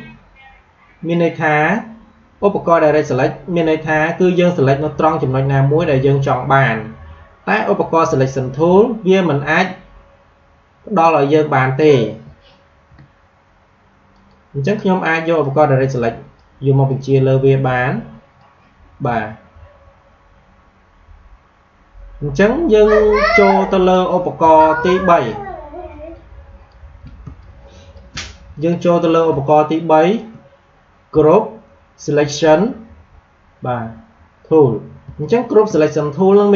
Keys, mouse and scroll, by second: 12.2 ctrl+Num_Lock, 12.6 ctrl+z, 14.0-21.0 drag, 23.1 click, 24.3 space, 24.6 click, 24.8 space, 27.3 click, 27.6 space, 29.4 click, 35.0 space, 35.1 click.